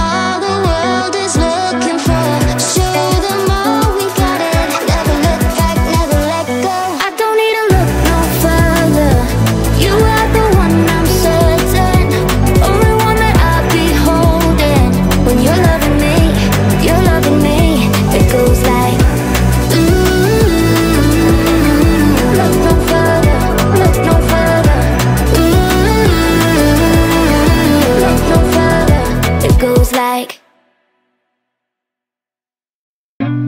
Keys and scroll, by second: 12.4 e, 12.8 BackSpace, 13.0 e, 13.5 k.